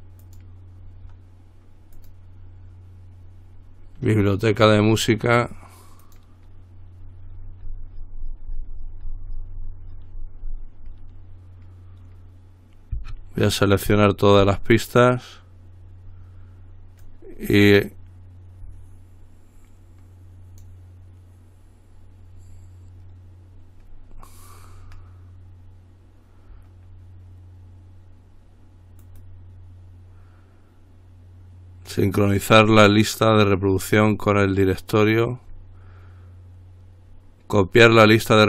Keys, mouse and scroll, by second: 0.5 click, 2.2 click, 6.3 click, 7.5-9.1 scroll down 2, 9.1-11.2 scroll down 1, 14.2 shift+click, 17.2-21.3 drag, 24.3-24.9 scroll up 2, 29.2 right click.